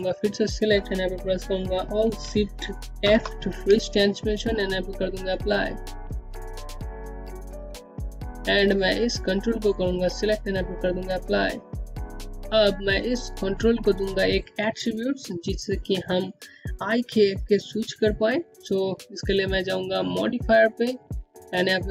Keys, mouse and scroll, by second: 2.5 click, 3.9 alt+shift+f, 5.9 click, 8.2 z, 8.8 click, 11.7 click, 12.1 scroll down 1, 18.5 click, 21.4 click.